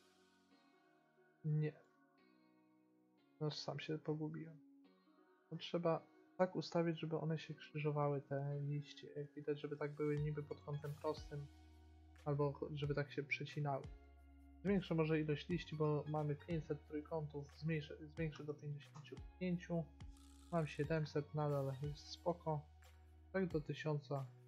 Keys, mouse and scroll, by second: 3.0-4.9 drag, 6.7-8.7 middle drag, 11.1-13.5 middle drag, 14.1 middle click, 15.2-17.2 drag, 18.5 5, 20.4 click, 21.2 middle click.